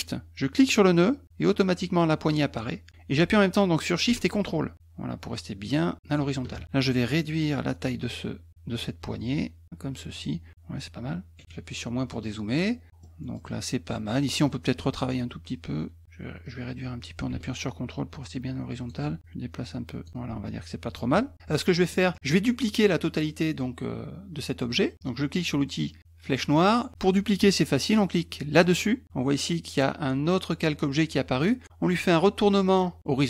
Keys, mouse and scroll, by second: 0.7-6.1 shift+drag, 7.2-10.1 drag, 12.1 middle click, 13.2 middle click, 14.4 click, 16.0-18.9 drag, 19.2 click, 20.1 ctrl+click, 21.9 middle click, 26.2 click.